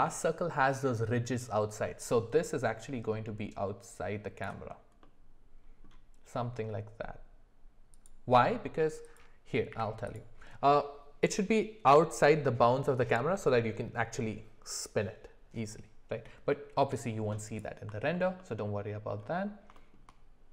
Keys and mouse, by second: 5.0-8.1 middle drag, 9.7 q, 18.1 alt+middle click, 18.8 alt+middle click, 19.7 shift+middle click.